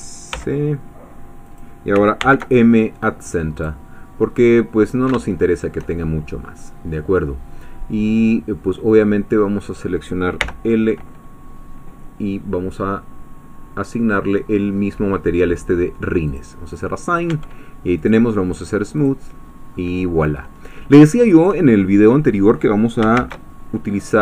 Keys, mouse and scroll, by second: 0.4 s, 1.5 click, 2.2 alt+m, 3.6 click, 4.5-6.7 middle drag, 9.0 scroll up 1, 10.4 l, 11.0 scroll down 1, 16.3 click, 17.4 Tab, 18.0 right click, 19.0 click, 19.7 middle click, 20.6 scroll down 1, 21.0 shift+middle click, 23.2 shift+a.